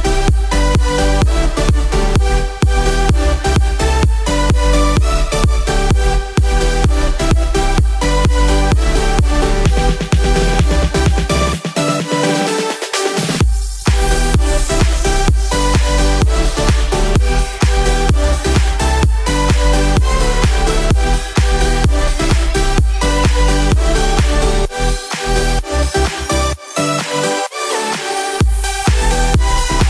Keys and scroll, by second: 0.8 ctrl+z, 3.5 ctrl+z, 18.4 ctrl+z.